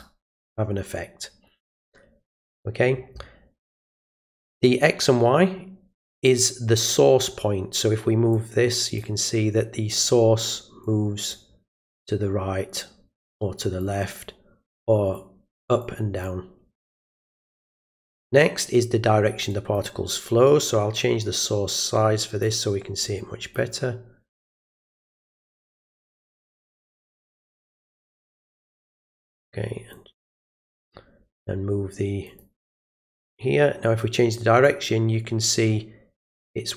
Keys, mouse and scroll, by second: 1.6 click, 8.3 click, 10.8 click, 13.2 click, 14.8 click, 15.8 click, 19.5 click, 21.4-22.4 drag, 23.0 click, 25.1 click, 26.2 click, 27.1 click, 28.3 click, 29.9 click, 32.3 click, 34.3 click.